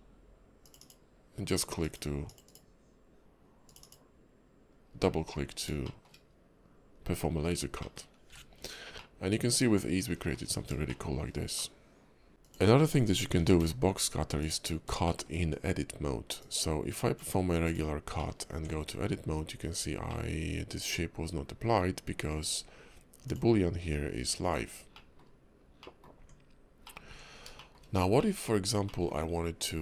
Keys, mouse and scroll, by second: 5.0 middle click, 5.4 scroll down 2, 5.8 shift+middle click, 6.2 scroll up 2, 6.9 KP_5, 7.3-7.8 scroll down 2, 7.8 middle click, 8.3 h, 8.5 scroll down 1, 8.9 middle click, 10.5 scroll up 3, 10.9 shift+middle click, 11.6 middle click, 12.3 click, 12.3 x, 12.3 shift+a, 12.3 scroll down 3, 13.3 g, 14.6 scroll up 3, 15.0 shift+middle click, 16.4 click, 18.2 middle click, 18.5 Tab, 20.1 middle click, 21.3 scroll up 1, 23.2 click, 24.9 middle click, 25.8 middle click, 26.2 Tab, 26.8 middle click, 27.1 Tab, 27.5 shift+middle click, 28.2 middle click, 28.8 middle click.